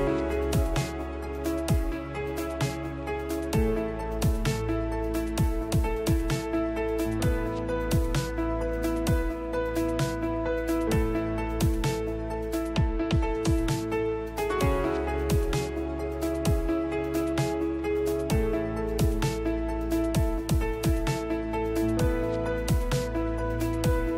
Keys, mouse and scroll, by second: 0.3-1.6 middle drag, 1.6-3.2 drag, 7.0 shift+Left, 13.7 n, 18.5-19.9 right drag, 20.3 shift+s.